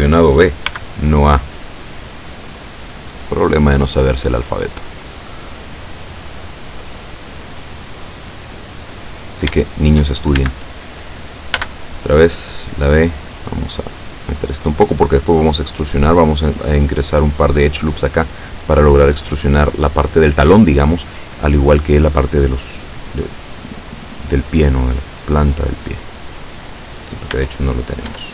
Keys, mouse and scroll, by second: 0.7 b, 1.6-4.3 drag, 5.3-9.5 drag, 9.7 shift+click, 10.5 shift+a, 11.6 b, 11.9 click, 13.2-15.0 drag, 25.4-27.1 middle drag, 27.4 Tab, 28.1 Tab.